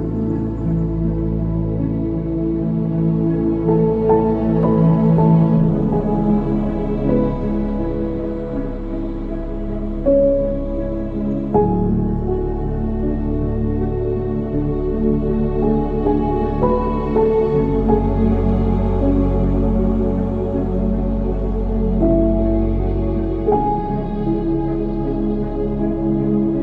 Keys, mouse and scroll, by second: 0.1-3.0 drag, 4.1 ctrl+s, 5.1 ctrl+s, 11.4-12.1 drag, 12.3 click, 13.7 click, 14.8-17.8 drag, 18.1-21.1 drag, 22.3 ctrl+s, 23.2 ctrl+s.